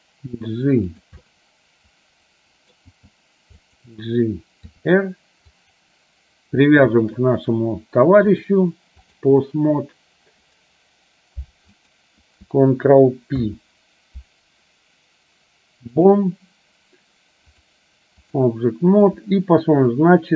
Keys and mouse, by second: 1.3-2.8 middle drag, 3.0 g, 4.8 r, 7.1 shift+click, 8.6 click, 12.0 click, 13.5 ctrl+p, 17.8 click, 20.2-20.3 drag.